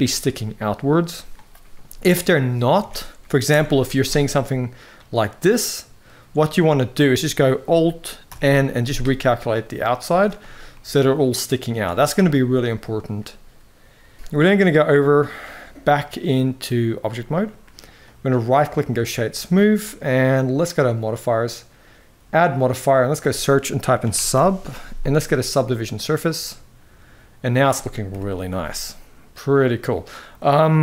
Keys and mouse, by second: 1.7 middle click, 2.5 a, 3.2 alt+n, 5.1 middle click, 6.1 z, 8.0 alt+n, 9.7 z, 10.4-11.7 middle drag, 12.2 middle click, 14.4-17.0 drag, 17.4 middle click, 18.1-18.7 right drag, 19.6 middle click, 20.8 click, 22.1-25.6 drag, 26.2-27.3 middle drag, 27.8 KP_1.